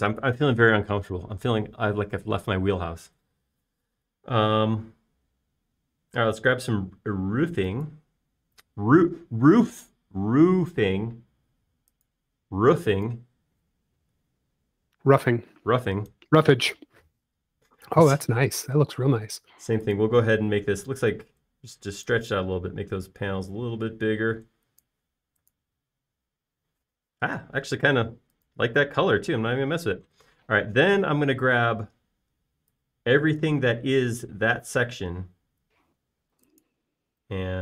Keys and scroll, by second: 29.3 space, 37.0 q.